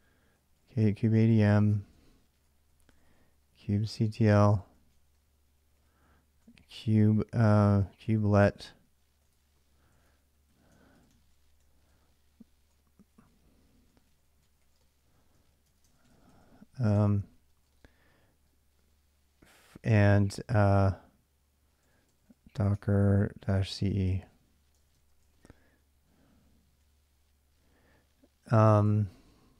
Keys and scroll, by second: 0.0-17.8 typing, 17.0 Return, 21.6-27.7 typing, 28.7 ctrl+[, 28.7-29.4 typing.